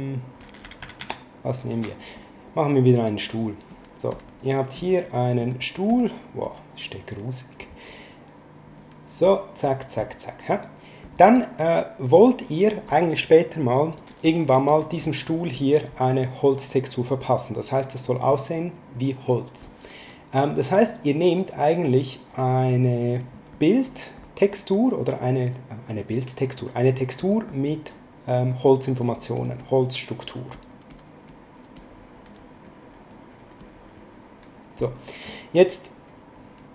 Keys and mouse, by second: 0.4 s, 3.2 click, 8.8 click, 15.3 click, 22.1 click, 23.2 click, 28.9 click, 36.1 click.